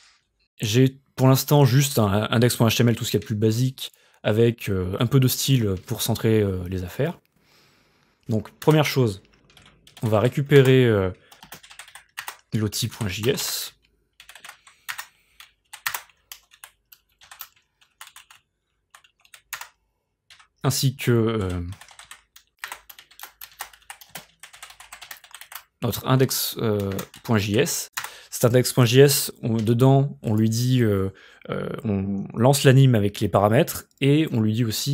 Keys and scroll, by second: 8.7 Return, 9.4-15.1 typing, 15.7 Down, 15.9 Return, 19.6 Return, 20.3-22.6 typing, 22.7 Return, 23.9 Left, 24.1-25.9 typing, 26.9 Return, 27.6 Up, 28.0 Return.